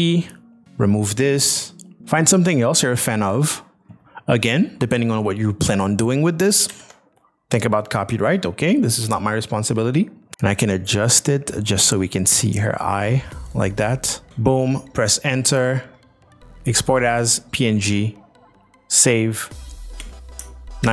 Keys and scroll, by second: 2.0 z, 6.7 ctrl+v, 14.3 Return, 19.9 Return, 20.4 alt+Return, 20.8 alt+Tab.